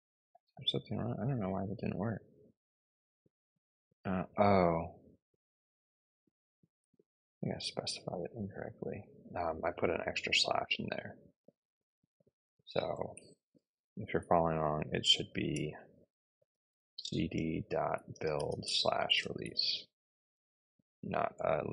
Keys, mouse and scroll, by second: 12.2-13.7 typing, 14.7-19.9 typing, 21.1 Return.